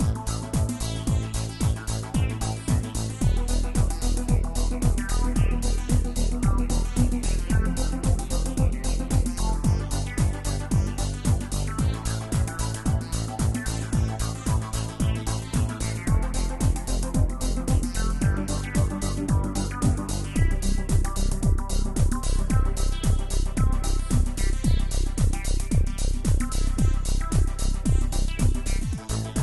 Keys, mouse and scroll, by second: 1.9 click, 2.8 click, 3.7-6.4 drag, 6.4 scroll down 5, 7.3-8.3 scroll down 1, 8.3-9.4 drag, 9.4-11.1 scroll down 8, 11.1-11.8 scroll down 4, 11.8-12.3 drag, 12.3-13.1 scroll down 3, 13.1-16.2 drag, 16.5 scroll up 1, 17.5-18.0 drag, 18.0-18.6 scroll up 4, 18.6-19.4 scroll down 4, 19.9-21.2 middle drag, 21.2-24.0 scroll down 2, 24.0-26.1 drag, 26.1 KP_0.